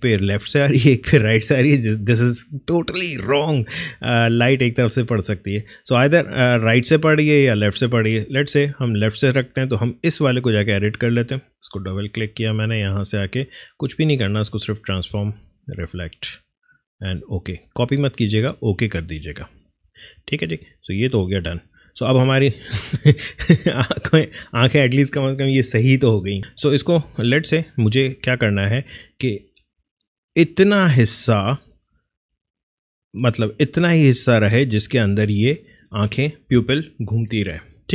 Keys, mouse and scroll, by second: 4.1 alt+click, 9.7 alt+click, 10.6 alt+right click, 11.2 alt+click, 13.6 alt+right click, 14.9 alt+click, 19.0 alt+click, 26.4 alt+Tab, 27.1 click, 35.2 click.